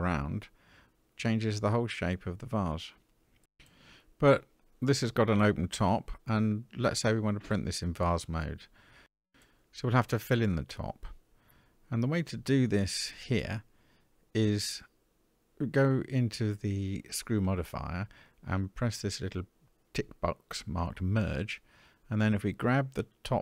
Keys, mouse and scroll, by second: 0.4-2.3 middle drag, 3.1-4.4 middle drag, 5.0 middle click, 8.4 shift+middle click, 9.5-10.3 scroll up 3, 19.7 click, 20.6 middle click.